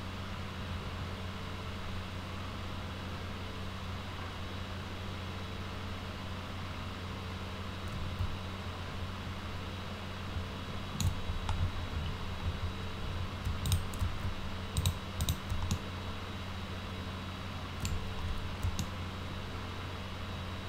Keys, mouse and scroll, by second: 13.7 click, 14.8 click, 15.2 click, 15.7-17.9 alt+middle drag, 18.8-20.6 alt+middle drag.